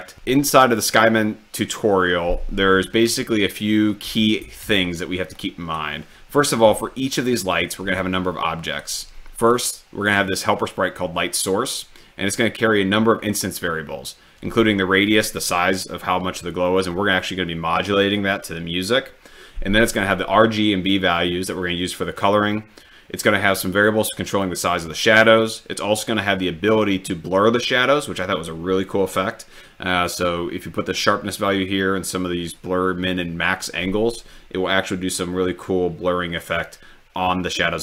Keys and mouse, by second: 3.6 ctrl+middle click, 5.5-6.1 drag, 8.0-9.1 drag.